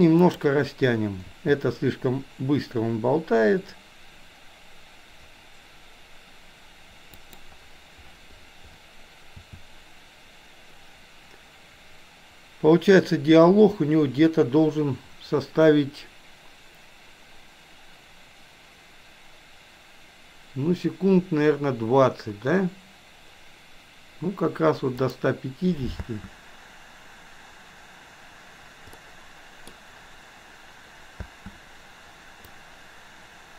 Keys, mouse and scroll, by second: 0.2 click, 1.2 s, 9.3 s, 26.0 space, 29.0-29.7 middle drag, 31.2 space, 32.6-33.5 drag.